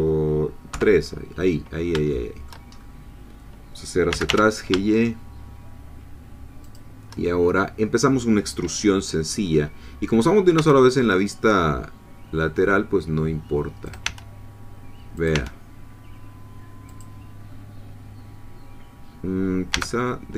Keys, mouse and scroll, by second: 0.7 3, 2.1 shift+middle click, 2.7 shift+scroll up 2, 4.1 g, 4.3 y, 6.6 shift+click, 10.5 e, 13.9 click, 14.0 e, 15.2 click, 15.3 e, 16.9-19.7 drag, 19.7 g.